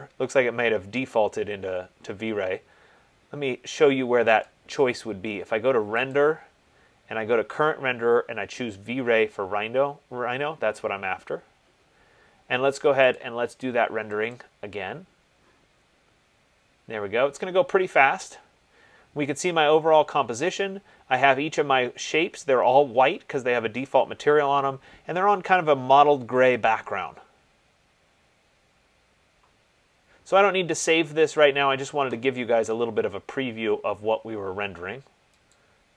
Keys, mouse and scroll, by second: 4.7 click, 6.3 click, 13.4 click, 14.6 click, 35.7 click.